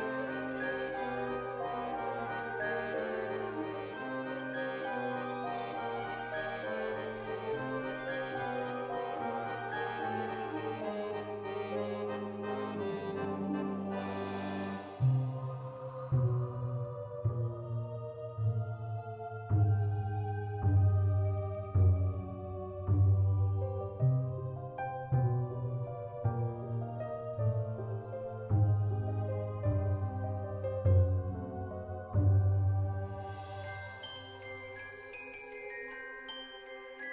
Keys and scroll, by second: 2.7 ctrl+c, 5.5 ctrl+v, 7.4 ctrl+s, 12.9 ctrl+c, 14.0 ctrl+v, 15.2 ctrl+s, 17.1 space, 17.7 v, 25.0 ctrl+s, 34.8 u.